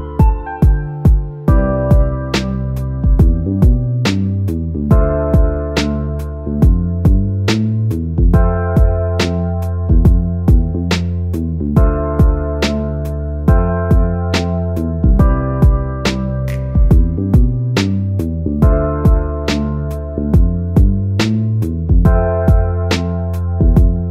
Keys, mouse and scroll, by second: 6.7-8.5 typing, 9.6-15.2 drag, 14.9-16.7 typing, 16.8-24.1 drag.